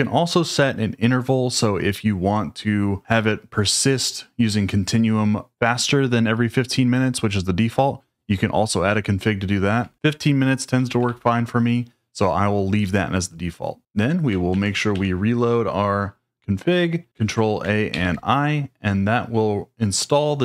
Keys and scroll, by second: 9.8 Escape, 10.6-11.5 typing, 14.5 ctrl+a, 14.9 r, 17.1 ctrl+a, 17.9 shift+i.